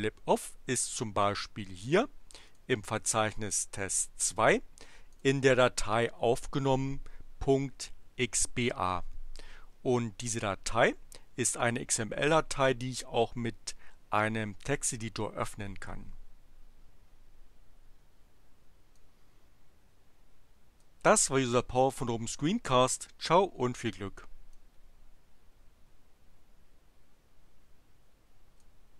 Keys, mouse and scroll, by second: 2.2 click, 5.1 click, 11.6 right click, 14.6 click, 18.8-21.0 drag, 24.5-28.8 drag.